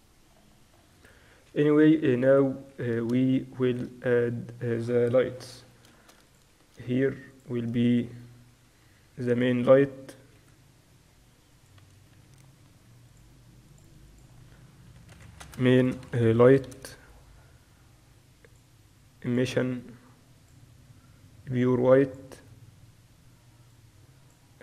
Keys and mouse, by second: 0.0-1.5 drag, 1.7 KP_2, 2.3-2.7 KP_6, 3.1 KP_6, 5.2 KP_1, 6.4-8.0 drag, 6.6 shift+a, 8.4 s, 9.9 middle click, 11.0 g, 13.8-16.1 drag, 18.6-20.4 drag, 20.5-22.4 drag, 23.9-24.6 drag.